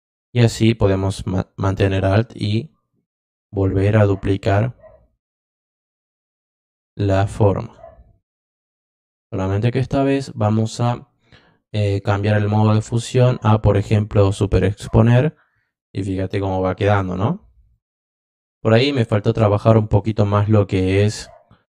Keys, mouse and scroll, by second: 1.9-7.6 alt+drag, 11.9 click, 12.8 click, 14.2 click, 17.0 click, 17.7 click, 18.9 click, 19.9 click.